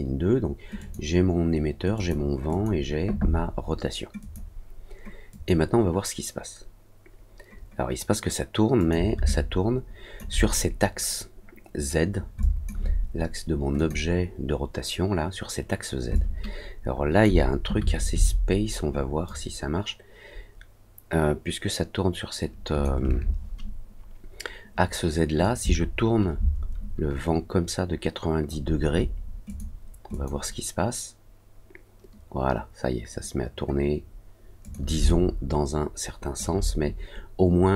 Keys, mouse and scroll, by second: 0.7 click, 1.9 click, 2.4 click, 4.1 click, 5.3 click, 8.7 click, 9.2 alt+click, 12.4 alt+click, 13.7 click, 16.1-17.2 alt+drag, 19.2-22.8 drag, 25.4-28.4 shift+drag, 29.4 click, 30.1 click, 34.6 click, 35.0-36.3 alt+drag.